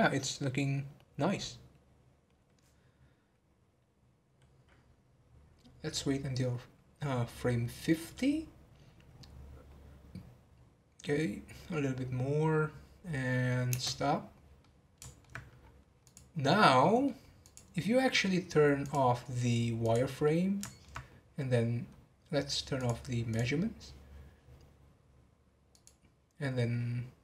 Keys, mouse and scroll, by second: 14.0 space, 14.6-15.5 middle drag, 15.5 scroll down 1, 16.0 scroll down 4, 16.0 click, 16.4-17.4 middle drag, 17.4 click, 18.8-20.2 drag, 20.2-21.9 middle drag, 21.9 scroll up 4, 22.7 click, 23.3 click, 25.7 click.